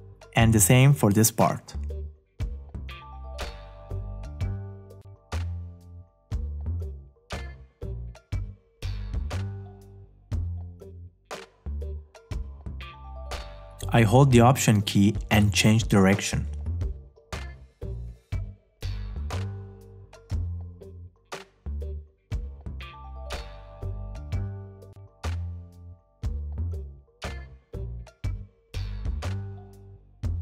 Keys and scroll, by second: 21.1 space, 22.5 space, 25.8 space.